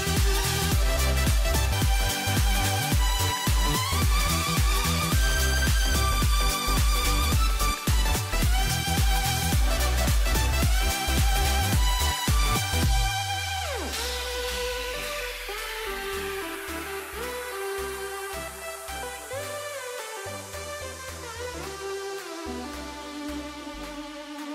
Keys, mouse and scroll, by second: 2.1 a, 6.4 click, 10.8 Tab, 15.2-24.5 middle drag.